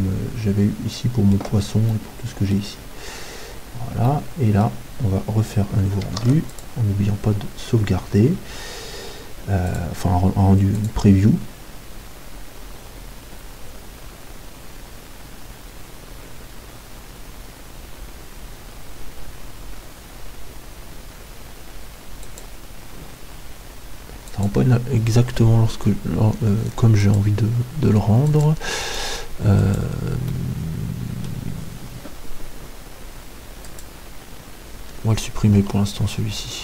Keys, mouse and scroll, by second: 1.9-6.0 middle drag, 6.2 ctrl+s, 9.7-11.9 drag, 27.2-29.2 drag, 30.8 right click, 31.6 middle click, 34.0-36.6 drag.